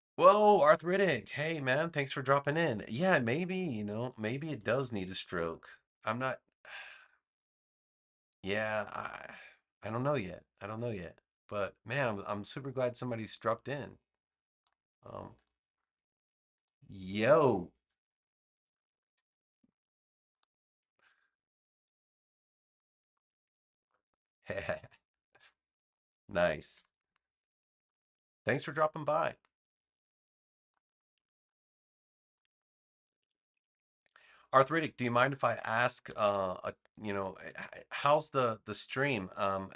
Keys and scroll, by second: 5.3 BackSpace, 17.6-19.0 typing, 23.7 Return, 26.7 super+-, 35.7 super+-, 36.2 super+-, 37.4 v.